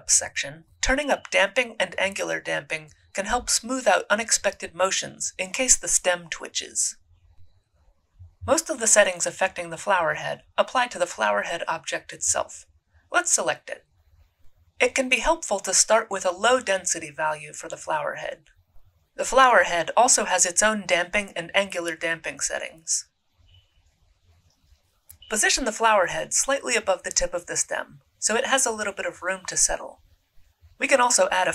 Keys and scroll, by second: 16.5-18.1 typing, 17.9 Return, 24.9 e, 26.7 f, 28.1 w.